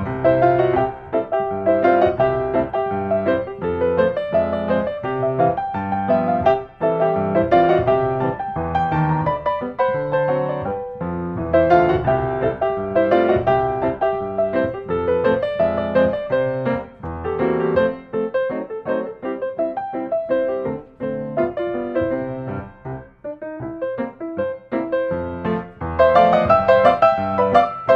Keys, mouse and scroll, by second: 0.4 click, 2.3-3.3 scroll, 3.5 click, 5.1 click, 6.0 click, 8.6-9.7 drag, 10.2 middle click, 10.4 scroll, 11.2 middle click, 11.5-12.6 drag, 12.9 5, 13.2 Return, 15.0-16.9 middle drag, 15.0 scroll, 15.9-16.2 scroll, 18.1 click, 19.8-21.6 middle drag, 19.8-20.4 scroll, 20.4 scroll, 22.6-25.3 middle drag, 22.6-23.6 scroll, 23.8-24.3 scroll, 24.3-24.8 scroll, 26.1-27.2 drag.